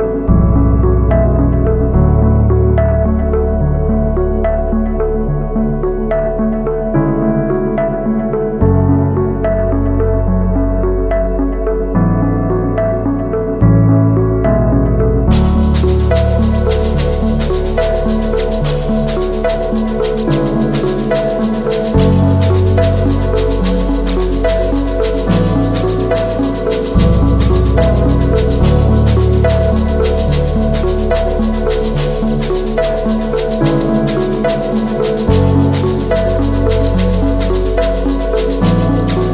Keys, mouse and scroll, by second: 1.2 alt+shift+click, 4.6 Return, 7.1 ctrl+click, 7.6 right click, 17.9 shift+click, 19.3 shift+click, 21.5 shift+click, 29.3 double click.